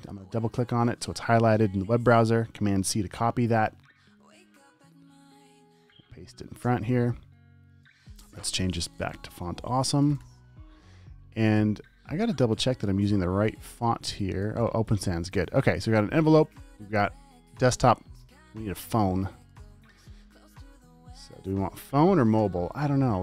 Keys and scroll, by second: 3.1 super+c, 6.2 super+v, 6.9 space, 10.2-11.0 typing, 21.6 super+a, 22.2-23.2 typing.